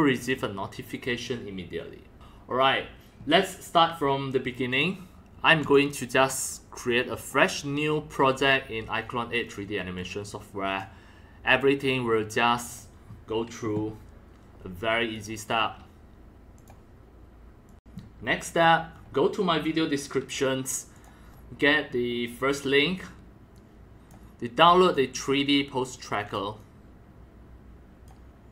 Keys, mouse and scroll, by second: 0.4-2.9 drag, 4.7 click, 5.6 click, 7.7 scroll down 1, 9.9 click, 12.3 click, 12.9-15.6 drag, 16.5 click, 17.7 click, 17.9-18.4 drag, 18.5 click, 20.9 click, 23.6-24.1 drag, 24.8 click, 25.9 click, 26.6-28.1 drag.